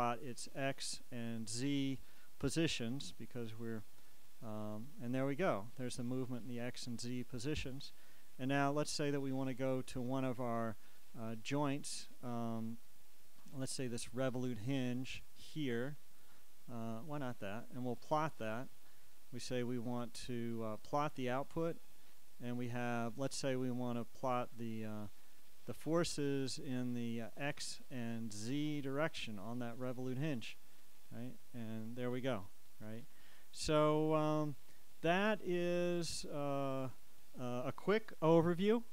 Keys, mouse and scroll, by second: 0.6 click, 1.6 click, 3.6 click, 7.6 click, 11.1-14.0 drag, 14.4 click, 18.0 click, 21.1 click, 27.5 click, 28.6 click, 30.7 click, 34.4 click.